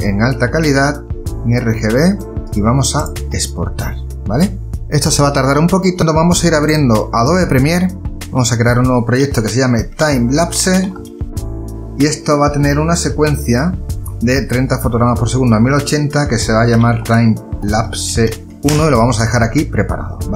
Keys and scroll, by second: 9.6-11.2 typing, 16.6-19.3 typing.